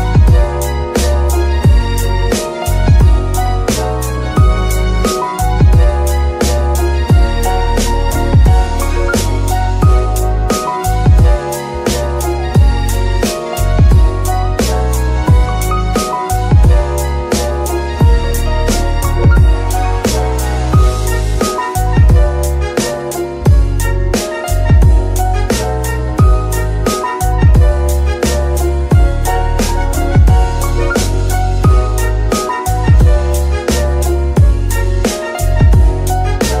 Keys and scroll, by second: 10.3 g, 14.8 s, 25.3 Tab.